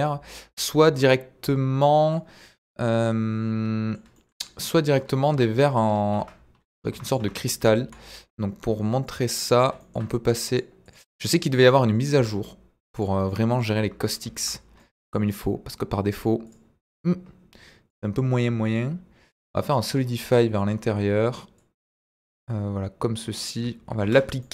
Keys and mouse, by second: 0.0-2.0 middle drag, 2.1-3.9 middle drag, 5.2 KP_1, 6.1 Tab, 6.9 Tab, 7.0 click, 7.2 Tab, 7.5 z, 9.4 click, 10.5 click, 10.8 click, 11.3 click, 12.1 x, 13.2 middle click, 13.8 Tab, 14.2 z, 14.7-15.1 middle drag, 16.4 click, 19.3 click, 19.7 middle drag, 20.2 middle click, 20.6 middle drag, 21.5-23.4 drag, 24.0 ctrl+a, 24.4-24.5 middle drag.